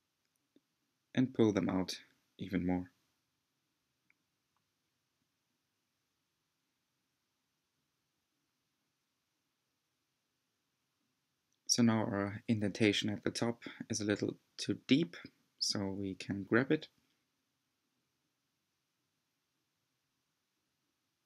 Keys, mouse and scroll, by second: 0.8 shift+click, 1.3-3.2 middle drag, 3.2 g, 10.0-11.7 middle drag, 11.7 scroll down 1, 12.3-12.6 scroll up 2, 13.1-17.1 middle drag, 17.6-19.0 middle drag, 19.0 click, 20.8 c.